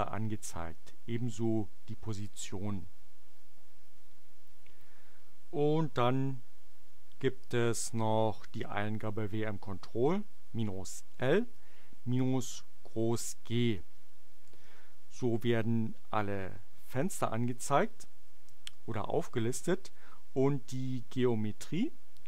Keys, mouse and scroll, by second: 6.6 Up, 7.4 BackSpace, 7.9 Up, 11.1 space, 11.5 -, 12.3 shift+g, 14.5 Return, 21.0-22.2 drag.